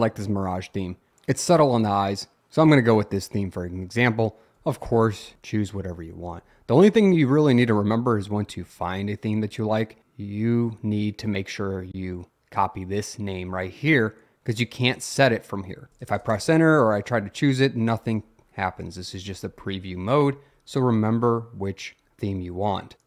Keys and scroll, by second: 5.0 Down, 5.3 Down, 9.3 Up, 15.1 Return, 17.2 Down, 19.3 Up, 19.5 Up, 20.5 Down, 22.0 Up, 22.2 Up.